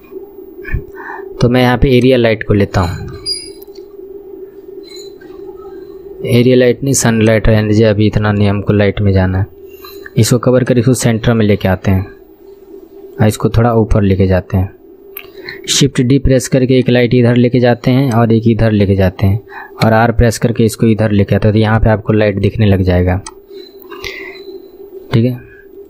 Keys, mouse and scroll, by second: 2.0-5.0 drag, 7.3-9.3 drag, 9.3 KP_3, 9.8 scroll down 4, 10.7 click, 10.7 scroll down 1, 13.9-15.2 drag, 15.2 scroll down 3, 15.9 shift+d, 16.8-18.4 drag, 20.0 r, 23.2 click.